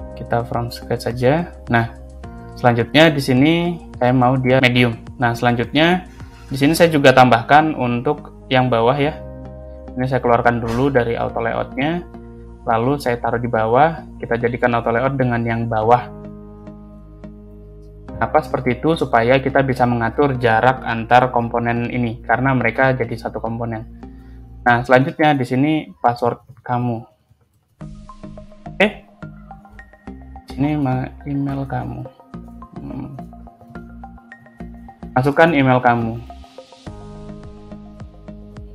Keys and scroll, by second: 9.0 ctrl+c, 9.3 ctrl+v, 13.2 Down, 16.2 shift+a, 20.6 8, 21.2 Return, 26.0-27.7 typing, 31.4-36.0 typing, 38.1 ctrl+Right, 38.6-38.7 typing.